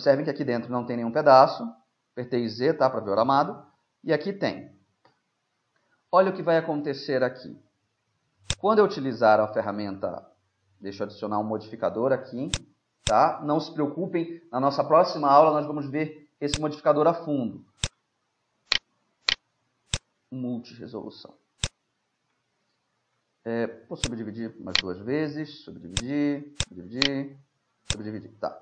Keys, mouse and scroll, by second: 5.1 z, 7.0-14.0 middle drag, 8.5-11.0 drag, 12.6-14.8 drag, 16.5-18.3 drag, 18.8-21.1 right drag, 19.9-21.6 drag, 22.7-24.0 middle drag, 24.0-25.7 drag, 24.8-26.6 right drag, 26.0-28.6 drag, 27.1-28.6 right drag.